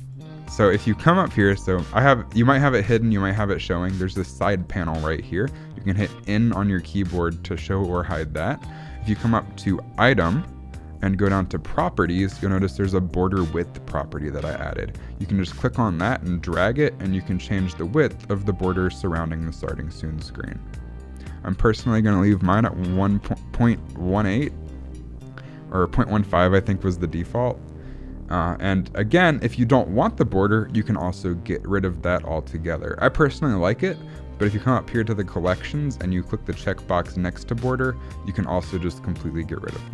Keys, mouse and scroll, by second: 0.1 click, 0.8 click, 1.4 n, 3.1-7.9 typing, 9.6 click, 15.4 click, 21.7 click, 23.2 BackSpace, 26.0 click, 37.3 click, 38.3 click, 38.9 click, 39.5 click.